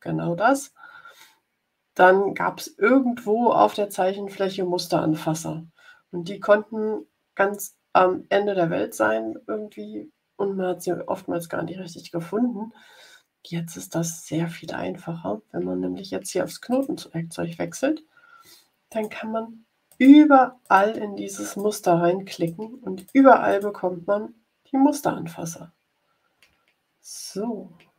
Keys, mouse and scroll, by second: 16.6 click, 18.8 click, 19.8 click, 20.5 click, 21.4 click, 22.2 click, 22.9 click, 23.4 click, 24.2 ctrl+scroll up 2, 25.0-25.3 ctrl+scroll up 2, 25.9-26.2 ctrl+scroll up 2, 26.7-27.3 scroll down 4.